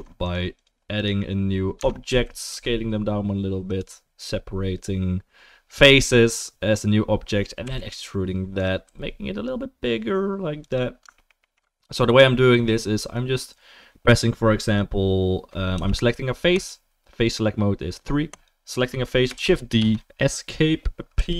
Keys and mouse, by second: 0.2 click, 0.9 click, 1.8 Tab, 2.1 a, 2.5 s, 3.2-11.2 middle drag, 7.6 e, 8.8 s, 11.4 alt+middle click, 12.0-18.4 middle drag, 15.7 3, 18.4 click, 18.4-21.3 middle drag, 19.4 shift+d, 21.1 p.